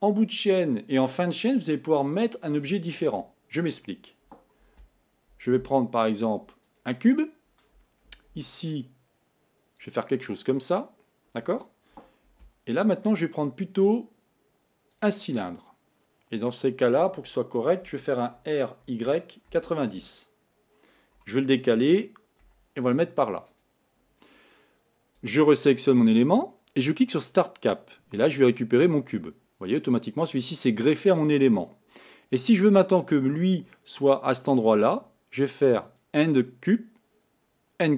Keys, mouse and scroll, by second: 4.7 shift+a, 8.6 s, 12.3 shift+a, 18.6 r, 21.3 g, 25.2 click, 27.4-30.4 drag, 36.1-37.9 drag.